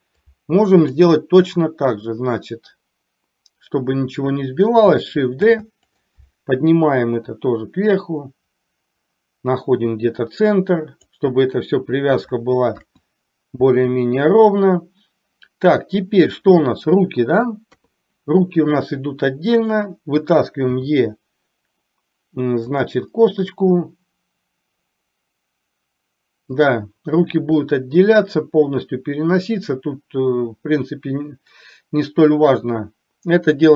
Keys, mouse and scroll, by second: 0.4 click, 5.5 shift+d, 7.3-11.0 drag, 12.9 KP_1, 17.8 KP_3, 19.6 click, 20.9 e, 26.5 click.